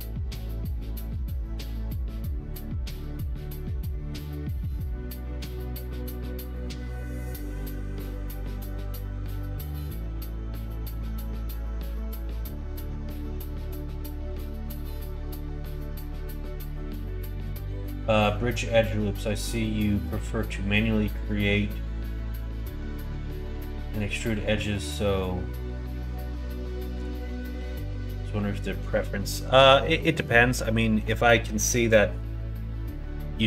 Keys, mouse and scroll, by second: 0.2 click, 0.5 click, 1.2 click, 2.4 middle click, 6.6 shift+middle click, 29.8 middle click.